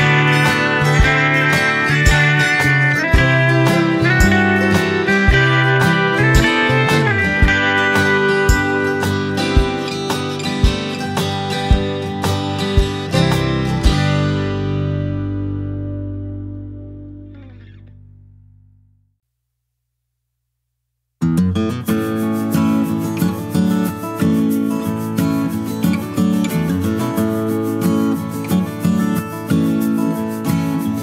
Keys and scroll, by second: 2.3 Right, 3.5 Right, 4.0 Left, 11.1 Left, 14.1 Down, 14.9 Right, 20.6 Up, 22.1 Right, 22.2 Down, 22.7 Right, 23.0 Left, 23.2 Right, 23.3 Up, 23.6 Right, 25.1 ctrl+x, 25.5 ctrl+v, 26.3 ctrl+z, 26.8 ctrl+v.